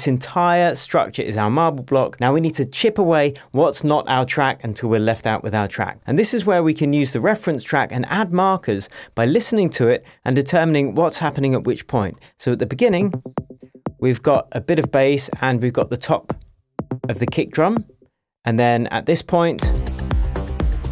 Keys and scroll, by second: 0.3 super+d, 12.8 space, 18.0 space, 19.6 space.